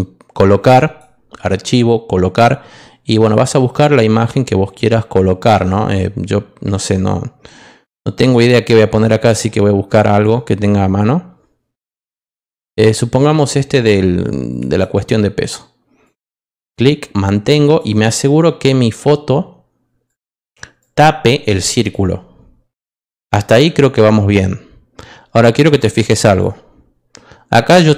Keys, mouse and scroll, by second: 0.7 click, 3.1-4.9 scroll down 4, 5.3-6.5 scroll down 4, 6.8-7.5 scroll down 2, 9.2-9.9 scroll down 2, 9.9-11.1 scroll up 2, 11.1 middle click, 11.6 scroll up 2, 12.5 middle click, 12.5-13.1 scroll down 2, 14.5 click, 14.7 click, 16.0-17.7 drag, 20.0 click, 20.8-21.9 drag.